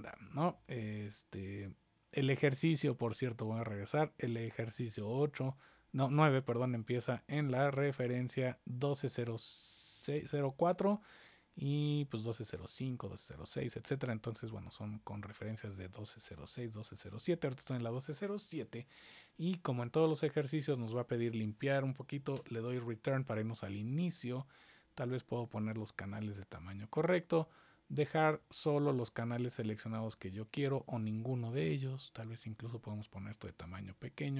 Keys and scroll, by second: 22.3 Return.